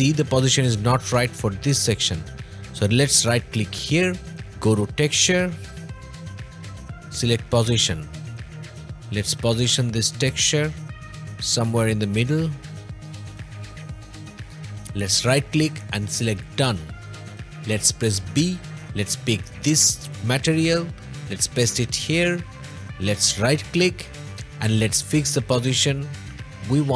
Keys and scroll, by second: 17.3 b.